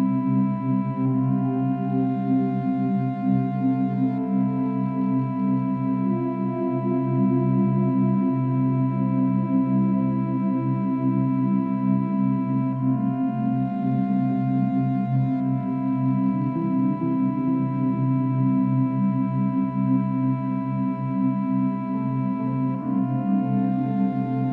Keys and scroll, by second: 7.2 ctrl+d, 7.8 space, 9.0 ctrl+-, 9.1 ctrl+=.